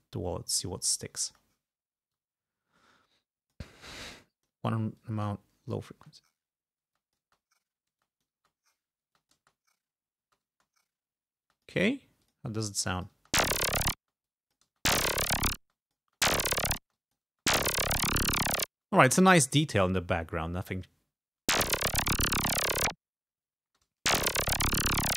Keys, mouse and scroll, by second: 1.2 space, 2.1 space, 2.2-3.7 drag, 4.3 click, 5.0 click, 6.0 space, 6.9 space, 7.0 click, 8.0 space, 8.0 click, 9.1 space, 9.2 click, 10.3 space, 11.5 space, 11.5 click, 12.2 click, 13.1 click, 13.2 space, 14.0 space, 14.3 click, 14.7 space, 15.6 space, 15.7 click, 16.9 space, 17.0 click, 18.7 space, 19.8 g, 20.2-20.5 scroll down 2, 20.8 scroll up 2, 21.3 space, 22.8-23.1 scroll up 2, 23.5 scroll down 2, 23.7 space.